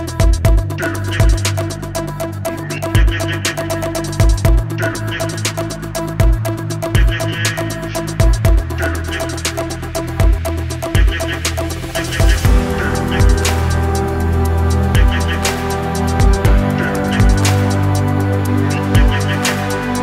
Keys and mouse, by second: 0.1-3.6 typing, 1.5 shift+click, 2.5 shift+click, 4.6 shift+click, 7.2 f, 7.5 shift+click, 7.7 a, 8.1 2, 9.0 shift+click, 9.3-11.0 typing, 10.4 shift+click, 12.5 f, 12.8 shift+click, 13.2 1, 15.6 f, 15.8 a, 16.5 shift+click, 17.9 z, 18.2 shift+click, 19.2 c.